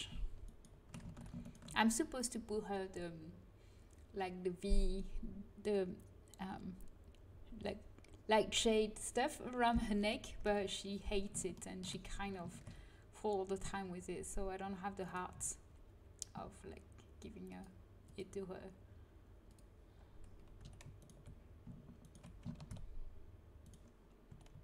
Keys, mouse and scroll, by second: 1.0 ctrl+z, 10.4 KP_1, 12.5 ctrl+b, 15.3 a, 15.6 a, 17.6-21.0 drag, 20.5 a, 20.9 right click, 22.5 ctrl+b, 23.5 click, 24.2 a.